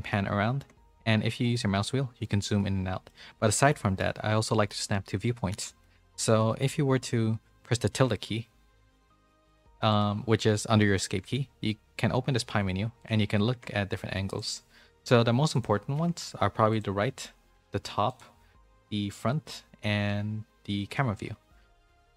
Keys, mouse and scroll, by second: 2.5 middle click, 3.7 middle click, 5.8 shift+middle click, 6.4 middle click, 13.5 `, 15.9 `, 16.9 `, 18.5 `, 19.7 `, 21.7 middle click.